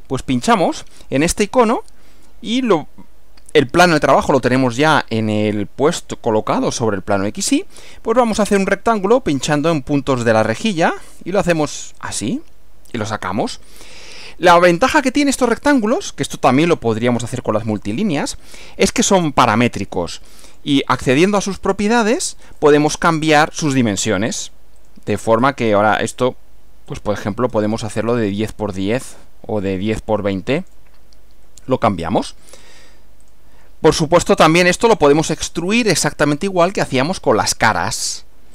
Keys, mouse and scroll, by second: 0.6 click, 9.3 click, 12.0 click, 13.0 click, 19.0 click, 20.6 click, 21.9 click, 24.8 click, 25.5 scroll down 2, 26.9 click, 27.5-28.7 scroll down 1, 30.7 click, 33.3 click, 35.5 click.